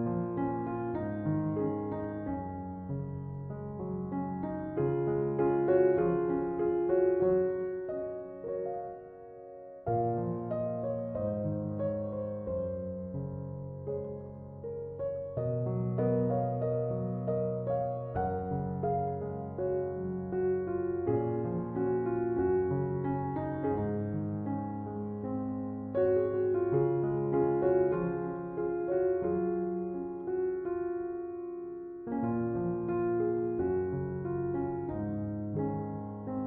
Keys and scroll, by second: 26.0 space.